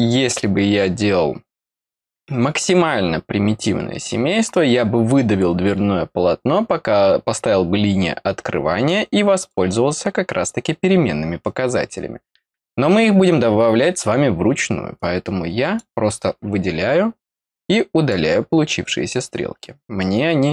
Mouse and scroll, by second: 8.8 click, 14.9 click, 17.6 click.